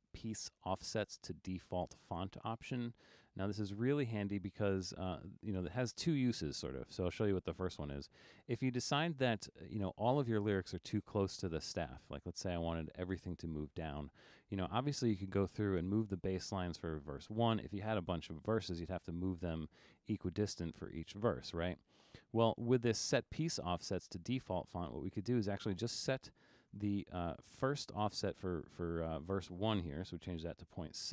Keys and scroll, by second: 26.9 BackSpace, 30.4 6.